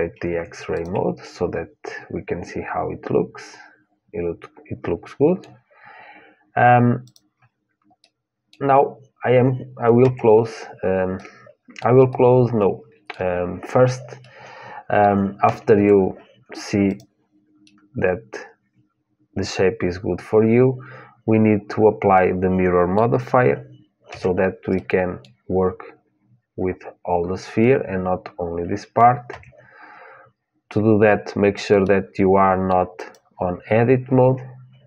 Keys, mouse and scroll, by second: 0.0 Tab, 0.0-2.5 drag, 2.5 middle click, 6.8-8.8 drag, 8.8-9.8 middle drag, 9.8 Tab, 10.9-13.8 middle drag, 14.0-15.9 middle drag, 15.5 Tab, 16.6-18.6 drag, 16.6-19.4 middle drag, 23.8 Tab, 24.5-26.5 middle drag, 29.1 Tab, 31.6-32.7 middle drag, 32.7-34.8 drag.